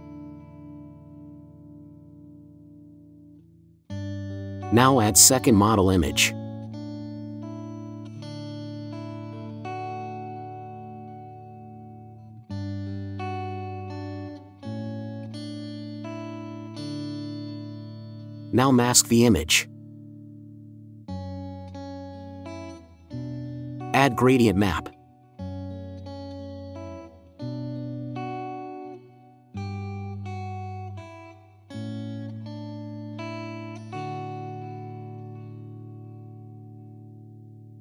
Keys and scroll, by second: 0.8 ctrl+z, 15.0 ctrl+t, 18.2 Return, 35.5 space.